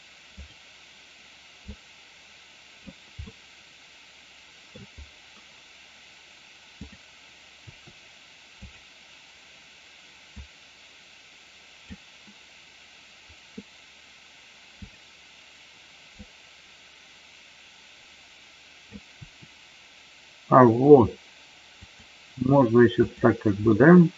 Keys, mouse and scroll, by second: 1.6-2.7 drag, 3.2-4.6 middle drag, 6.7 click, 7.5 r, 10.3-11.8 drag, 14.8 click, 16.3-18.9 drag, 19.2 r, 21.8 click, 22.9 click, 23.7-24.1 middle drag.